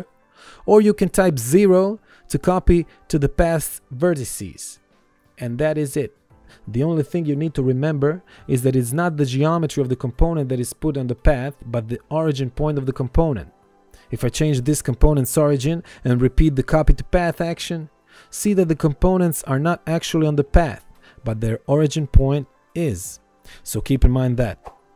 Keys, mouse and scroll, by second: 0.7 KP_0, 2.7 Return, 5.7 click, 6.1 KP_5, 6.2 KP_0, 6.3 Return, 7.5 ctrl+z, 7.8 ctrl+1, 8.2 click, 13.0 right click, 14.9 click, 17.3 ctrl+1, 17.6 click, 20.3 ctrl+1, 21.1 click.